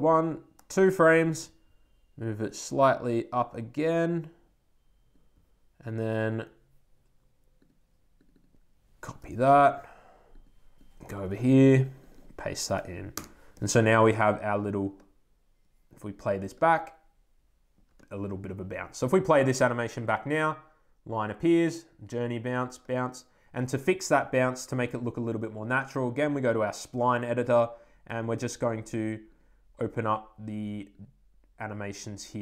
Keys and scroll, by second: 13.0 super+Return, 13.7 Return.